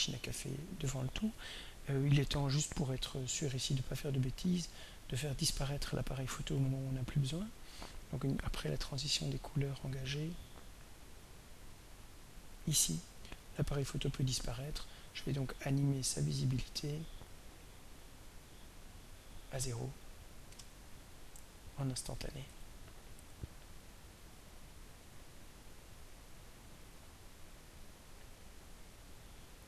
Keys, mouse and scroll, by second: 6.8-15.5 drag, 16.5 click, 17.9 click, 18.3 click, 19.8 0, 20.4 Return, 22.5 right click, 27.3 click, 28.9-29.6 drag.